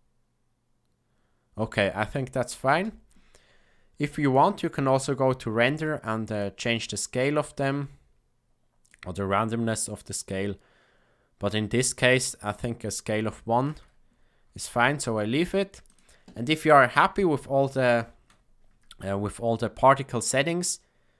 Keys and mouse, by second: 2.7 space, 4.2 click, 6.5-8.9 drag, 12.5 click, 15.8 click.